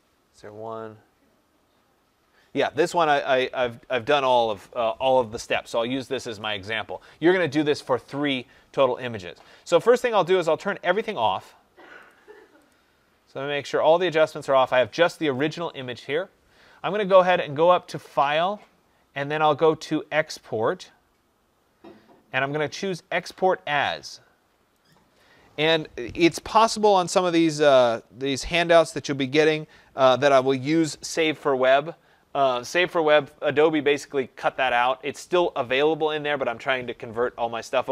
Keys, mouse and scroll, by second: 10.5 click, 11.0 click, 11.4 click, 12.0 click, 12.6 click, 13.6 click, 18.1 click, 25.2-34.1 drag.